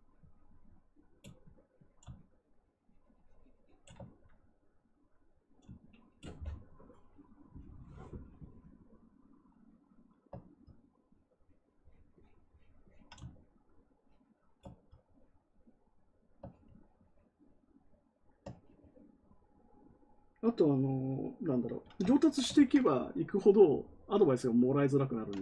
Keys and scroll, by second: 22.4 ctrl+z.